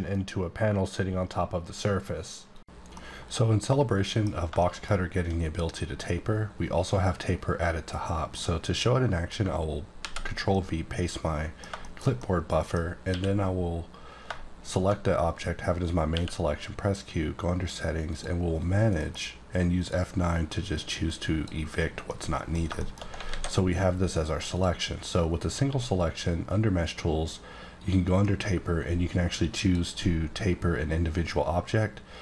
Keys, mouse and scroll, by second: 4.5 click, 4.6 middle click, 5.5 scroll up 2, 6.0-7.3 scroll down 1, 8.4 middle click, 9.9 ctrl+v, 10.5 middle click, 13.0 q, 14.6 shift+click, 16.1 q, 18.0 click, 19.0 F9, 19.8 click, 21.0 click, 22.1 middle click, 23.2 alt+a, 24.5 click, 25.6 q, 29.6 q, 29.8 click, 31.8-32.2 scroll down 1.